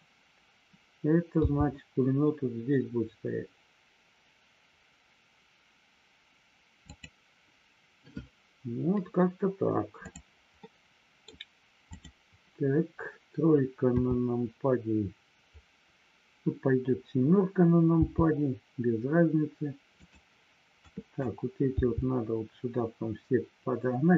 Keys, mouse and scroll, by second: 1.4 g, 6.8 click, 10.0 click, 10.5 scroll up 1, 10.7 middle click, 11.9 click, 13.9 KP_7, 19.9 click, 20.9 click.